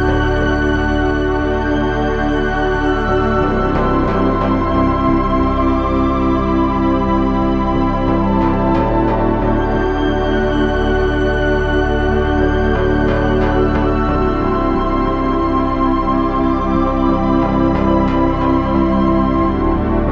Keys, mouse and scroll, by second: 5.5 KP_1, 6.8 KP_3, 7.7 Tab, 9.1 c, 10.6 s, 17.3 s.